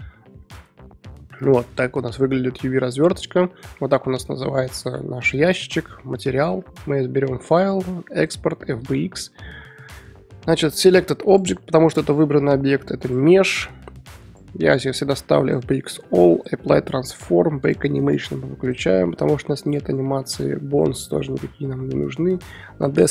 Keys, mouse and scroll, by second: 0.6 Tab, 2.2 middle click, 3.1 Tab, 8.9-13.4 drag.